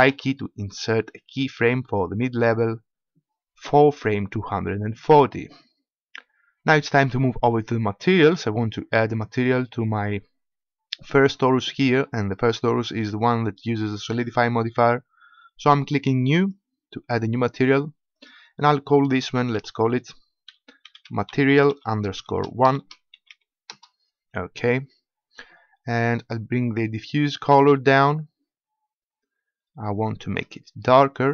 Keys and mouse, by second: 0.0 i, 9.0-26.9 drag, 26.9-31.3 middle drag.